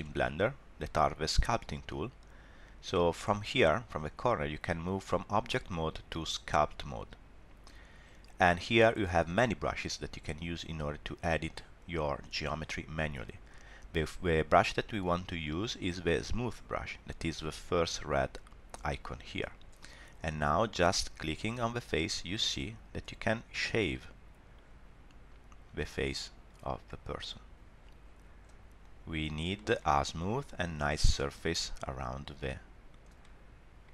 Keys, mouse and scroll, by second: 1.4 click, 18.5 click, 20.9 click, 23.2 middle click, 23.9 click, 26.2 middle click, 26.9 click, 28.8 click, 29.5 middle click, 30.0 click, 30.9 middle click, 31.3 click, 33.2 middle click.